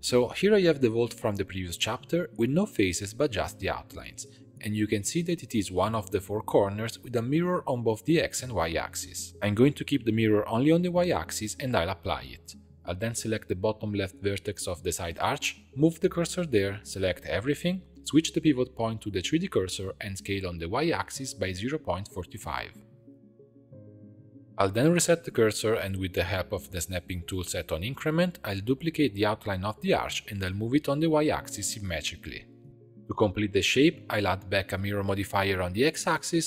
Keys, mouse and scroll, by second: 0.0-3.9 middle drag, 3.9 click, 4.8-8.3 middle drag, 8.3 click, 9.1-10.7 middle drag, 10.7 click, 11.2-11.6 scroll down 2, 11.6-12.8 middle drag, 12.8 ctrl+a, 12.9-13.8 ctrl+shift+middle drag, 13.8 click, 14.3 1, 14.8 click, 15.2 shift+s, 17.5 l, 18.7 click, 19.7-21.3 drag, 21.3 shift+middle click, 21.8-22.4 scroll up 3, 22.4 s, 25.9-27.0 drag, 27.2-28.6 drag, 28.6 shift+c, 29.4 shift+middle click, 29.9 shift+d, 30.4 shift+middle click, 30.7 scroll up 1, 31.0 g, 32.7 Tab, 33.3-35.7 drag.